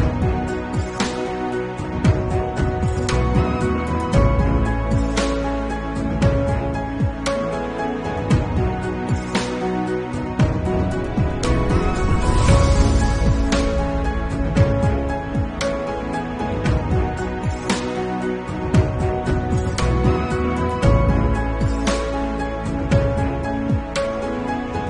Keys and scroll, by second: 1.4 ], 6.6 ], 7.2 ], 8.2 ], 11.0 [, 11.3 ctrl+alt+z, 15.3 ctrl+s, 17.7 ctrl+s, 19.9-21.8 typing, 20.2 Return, 23.4 [, 23.6 2.